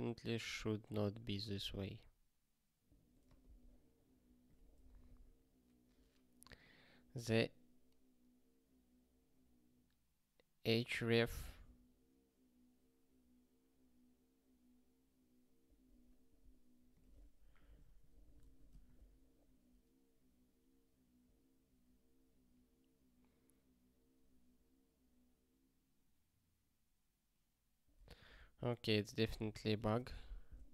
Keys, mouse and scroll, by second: 28.3 ctrl+k.